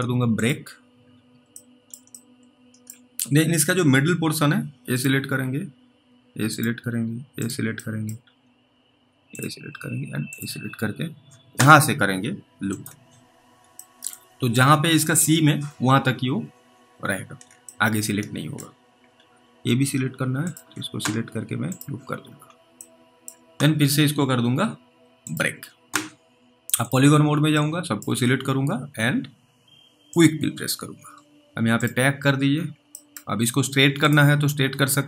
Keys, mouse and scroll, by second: 0.4 click, 1.1-1.8 scroll up 1, 1.8 middle click, 2.4 alt+middle click, 5.0 click, 6.6 ctrl+click, 8.2 middle click, 8.2 scroll up 1, 9.3 ctrl+click, 14.0 alt+middle click, 14.2 scroll down 1, 14.3-17.0 scroll up 3, 17.0-17.4 scroll down 3, 17.9 alt+middle click, 19.0-19.4 scroll up 3, 20.5 ctrl+click, 22.2-23.1 scroll down 3, 23.1 middle click, 25.3 click, 27.8 click, 30.2 click, 30.9-31.2 scroll down 2, 31.3 ctrl+z, 32.5-32.9 scroll down 1, 33.1 scroll down 1, 33.3 middle click, 33.3-33.9 scroll up 1, 34.1 click.